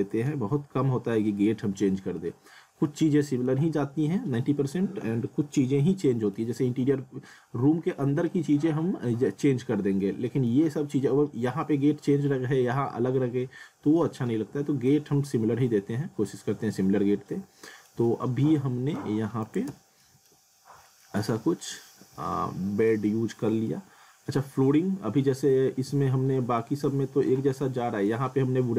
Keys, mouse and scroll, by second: 2.3 alt+middle click, 5.6 middle click, 10.0 alt+middle click, 14.0 alt+middle click, 15.1 alt+middle click, 18.0 alt+middle click, 19.4 click, 19.7 z, 20.0 middle click, 20.4-20.8 scroll up 1, 20.8 alt+middle click, 21.9 scroll down 1, 22.2 alt+middle click, 23.1 alt+middle click, 23.7-24.7 scroll down 1, 25.2 alt+middle click, 26.8 scroll up 1, 27.6 middle click, 28.3 scroll up 1.